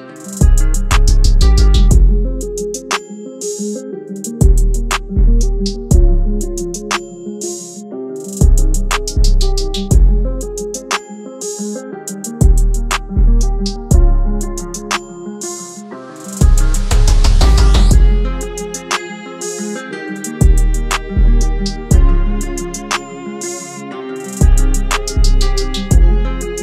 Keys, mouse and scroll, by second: 9.0 typing, 16.8 double click, 22.7-25.2 scroll down 1.